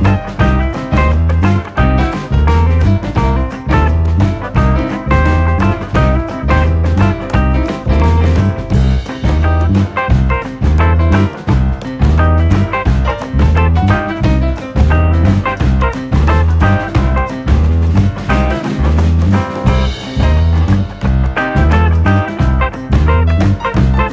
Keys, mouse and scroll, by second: 0.5 ctrl+z, 0.9 click, 1.3 s, 2.4 click, 2.8 click, 4.3 click, 4.7-5.1 scroll down 3, 5.1 click, 6.0 shift+middle click, 6.6 e, 7.6-9.8 drag, 10.7 click, 11.5 click, 12.1 a, 12.4 click, 13.9 click, 14.2-14.8 scroll up 1, 14.8-15.8 drag, 17.3 click, 17.7 click, 18.3 Delete, 19.1 click, 20.1 click, 21.5 click, 22.4 click, 23.0 click.